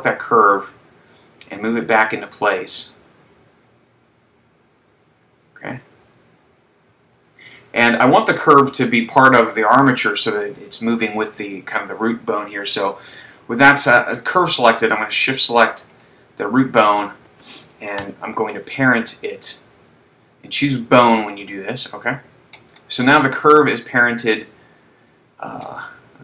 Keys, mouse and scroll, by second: 1.5 click, 16.0 shift+right click, 18.3 ctrl+p, 24.6 click, 26.1-26.2 scroll down 1.